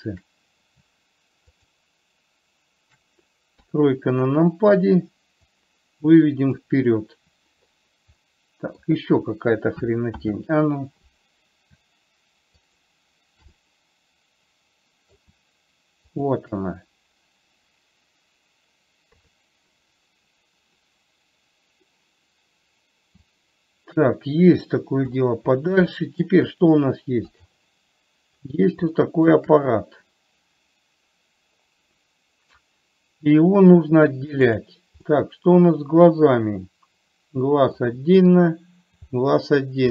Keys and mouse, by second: 0.2 click, 3.9 KP_3, 5.9-6.9 drag, 8.7 middle click, 10.5 ctrl+z, 13.9-15.5 middle drag, 16.4 shift+click, 19.4 KP_3, 23.8-25.4 drag, 26.3 shift+middle click, 27.7 click, 29.4 shift+middle click, 35.4-38.0 middle drag, 38.7 click, 39.8 middle click.